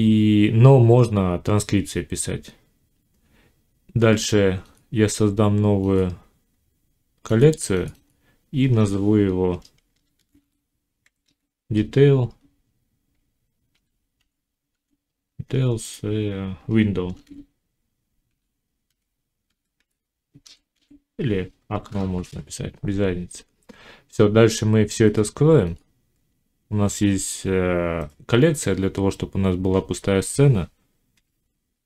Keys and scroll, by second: 10.0 shift+d, 10.3 e, 17.0 shift+w, 18.1 i, 21.7 Return.